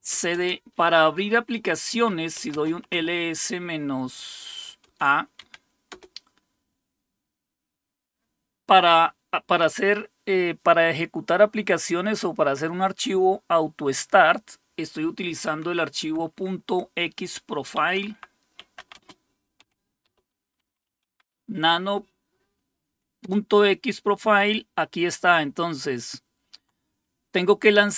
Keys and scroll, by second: 0.0-0.4 typing, 0.5 Return, 1.9-3.0 typing, 4.8-5.9 typing, 17.7-20.9 typing, 21.1 Tab, 23.2 Return, 26.6 Down, 27.8 Right.